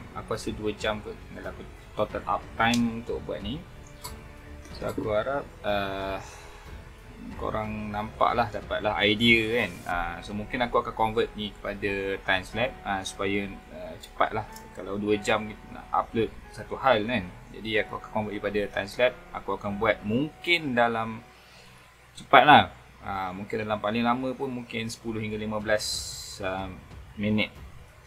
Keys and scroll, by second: 6.7 space, 13.1 space.